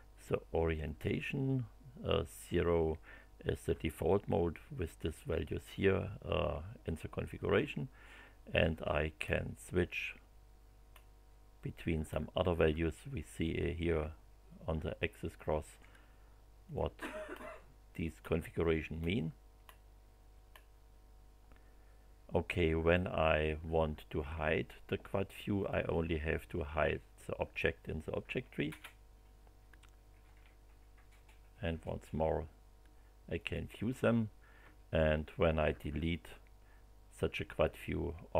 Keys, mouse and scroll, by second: 7.3 click, 9.2 scroll up 1, 10.9 scroll up 1, 12.0 scroll up 1, 16.6 click, 17.3 scroll up 1, 18.2 scroll up 1, 18.9 scroll up 1, 19.6 scroll up 1, 20.5 scroll up 1, 25.6 click, 28.6 space, 30.2 space, 33.3 click, 35.8 Delete.